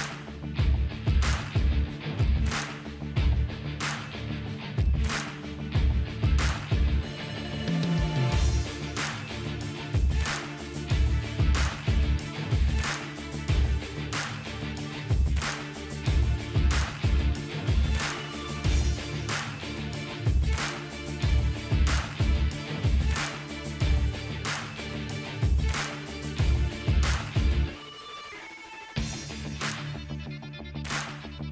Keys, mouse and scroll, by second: 0.4-0.9 ctrl+scroll down 1, 1.1 typing, 2.8-3.9 ctrl+click, 3.6-4.1 ctrl+drag, 4.4-6.1 drag, 6.5-6.9 ctrl+scroll up 1, 8.4 scroll down 1, 8.5 typing, 10.3 scroll down 1, 12.3-17.6 drag, 14.7 typing, 25.1 shift+p, 25.7 shift+b, 26.1 shift+g, 27.8 shift+g, 28.3 Right, 31.1 click.